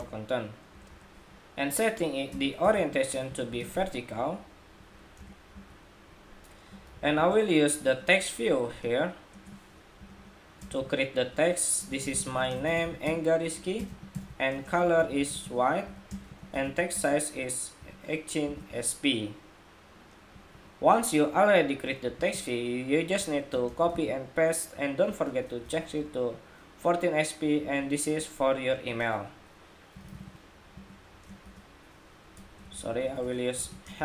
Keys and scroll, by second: 21.9 super+c, 23.7 super+v.